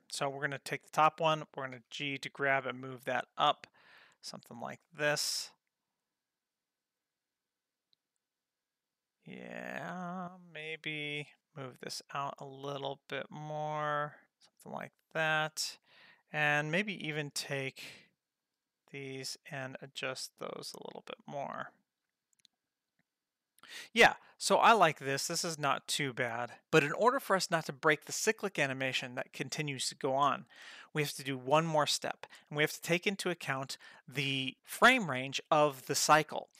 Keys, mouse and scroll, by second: 0.3 click, 1.8 g, 4.4-11.3 drag, 11.3 g, 12.7-15.7 drag, 17.2 shift+click, 18.4 click, 19.1 shift+click, 19.6 g, 21.8-26.7 drag.